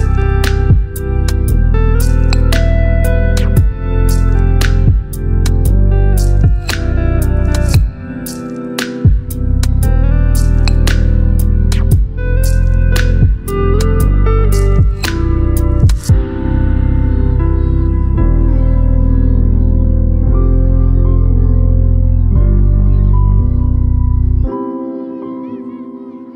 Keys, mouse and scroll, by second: 0.4-2.6 typing, 3.9-4.8 typing, 7.6-8.5 typing, 10.5-11.2 typing, 13.1-14.8 drag, 21.6 ctrl+t, 23.2-24.9 drag.